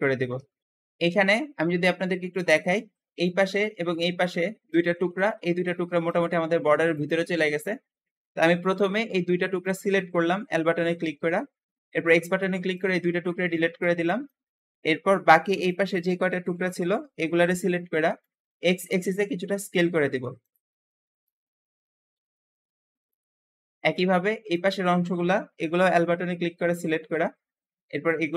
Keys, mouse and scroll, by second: 0.4 alt+z, 0.6-3.1 middle drag, 3.1 click, 4.2 click, 4.6-8.1 middle drag, 7.4 Escape, 8.1-9.0 scroll up 1, 9.0 l, 9.5-10.9 middle drag, 10.9 l, 10.9 l, 12.0 x, 12.1 x, 13.1 scroll down 1, 13.4 middle click, 14.4-15.5 scroll up 1, 15.5 shift+click, 15.9-18.8 typing, 17.8 middle click, 20.7 s, 21.1 click, 23.2 scroll down 2, 23.5 shift+middle click, 24.4 shift+click, 24.8-25.4 scroll up 1, 25.4-26.9 typing, 27.2-27.7 scroll up 2, 28.2 click.